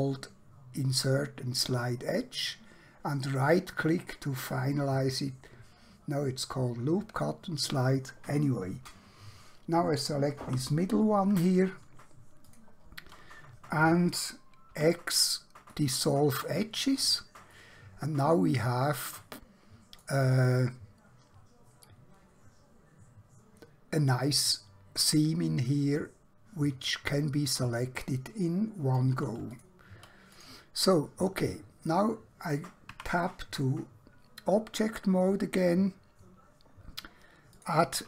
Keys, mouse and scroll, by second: 3.3 right click, 10.4 2, 14.8 x, 15.7 click, 17.6 middle click, 25.2 middle click, 29.2 3, 30.5 click, 31.0 middle click, 33.0 Tab, 37.6 click.